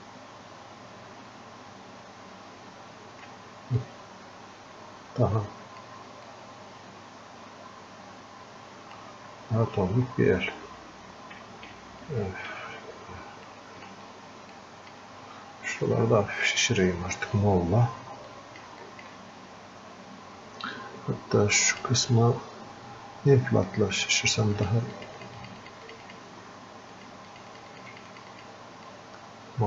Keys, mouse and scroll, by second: 9.3 scroll up 1, 11.7 f, 13.8-29.6 drag.